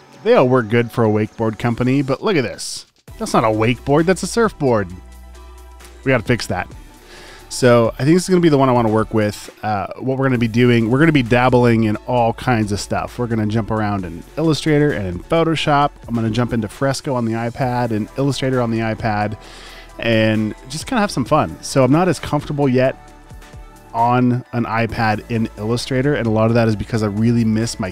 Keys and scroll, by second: 0.6 super+space, 1.1 space, 2.0 space, 2.6 space, 3.2 space, 3.8 super+space.